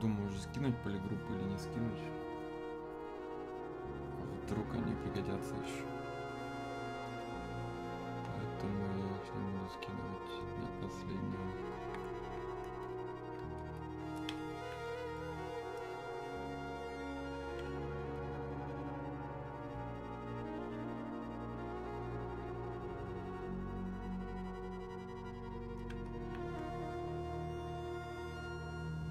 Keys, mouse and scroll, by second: 6.0-29.1 drag.